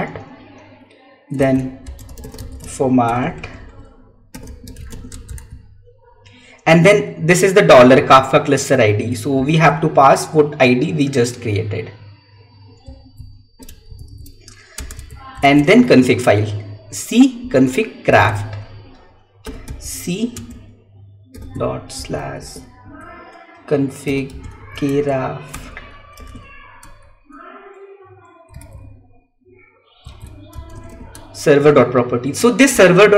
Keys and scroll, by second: 1.6 alt+Tab, 1.7 space, 5.0 space, 5.3 Tab, 10.0 Tab, 13.7 ctrl+c, 14.3 ctrl+v, 15.4 Tab, 18.1 Tab, 20.2 space, 22.7 Tab, 25.3 Tab, 26.7 Tab, 28.9 Tab, 31.0 Tab.